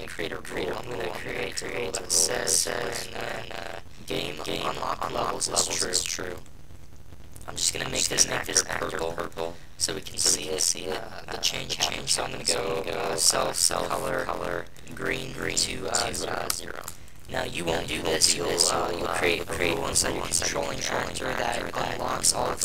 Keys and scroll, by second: 16.8 Return.